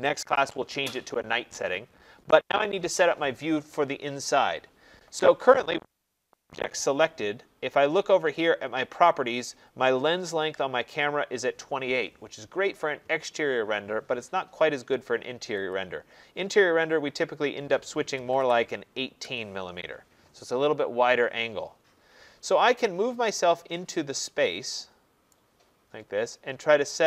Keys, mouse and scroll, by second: 6.1 Escape, 6.3 Escape, 6.5 Escape, 15.7 click, 17.9-19.2 typing, 21.9 middle click, 22.0 middle click, 25.3 right click, 25.6 middle click, 25.7 middle click, 26.2 middle click, 26.4 middle click.